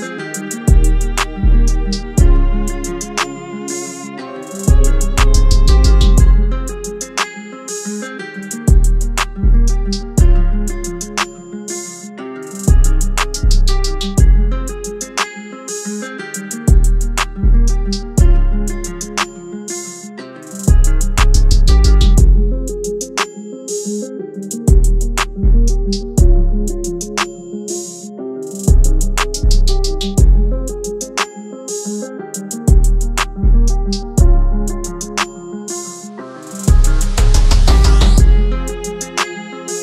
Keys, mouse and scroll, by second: 0.7-3.9 scroll down 1, 11.0-11.4 scroll up 1, 11.4-13.4 scroll down 1, 23.4 alt+shift+click, 26.4 Return, 29.9 ctrl+Left, 30.9-34.1 shift+Left, 38.1 shift+Left, 38.2 ctrl+Right.